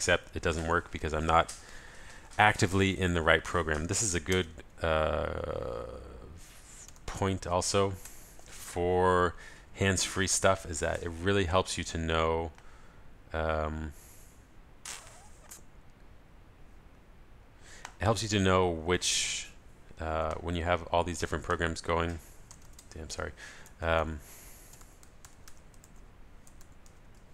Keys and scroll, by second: 4.3 super+space, 24.0 super+a.